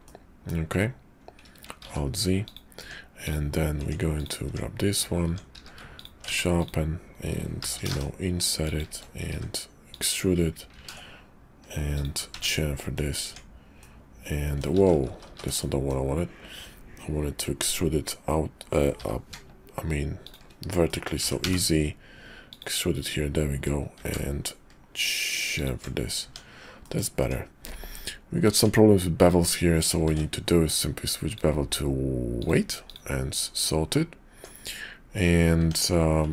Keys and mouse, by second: 0.0 middle click, 1.8 alt+z, 2.4 click, 2.7 Tab, 3.7 Tab, 4.1 click, 4.4 Tab, 5.1 Tab, 5.5 q, 6.2 Tab, 6.6 click, 7.6 i, 9.3 e, 10.7 ctrl+b, 12.3 Tab, 12.8 click, 13.2 Tab, 13.7 click, 14.8 ctrl+z, 15.2 ctrl+z, 15.5 click, 18.9 i, 20.8 click, 21.2 e, 23.9 ctrl+b, 26.2 Tab, 26.8 click, 27.2 Tab, 28.5 Tab, 30.1 ctrl+`, 34.3 Tab, 35.5 Tab.